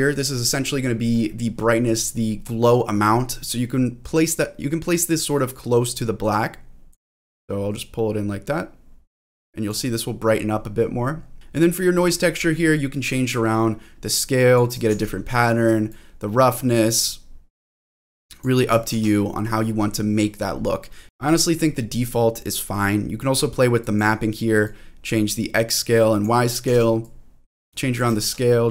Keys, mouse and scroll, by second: 0.4 scroll up 1, 0.6-1.8 scroll down 4, 1.6-3.4 scroll up 2, 3.4-4.2 scroll up 1, 4.2 click, 5.3 click, 6.4 click, 7.3-9.6 drag, 10.5-11.4 scroll down 3, 11.2-13.4 scroll up 3, 13.4-14.5 drag, 14.9 ctrl+z, 15.9-18.4 drag, 18.9 ctrl+z, 19.5-20.5 scroll down 1, 20.5-20.8 scroll down 2, 20.8 middle click, 21.7-22.2 scroll down 2, 23.8 click, 24.6-26.2 drag, 26.7 ctrl+z, 27.0 click, 28.2 ctrl+z.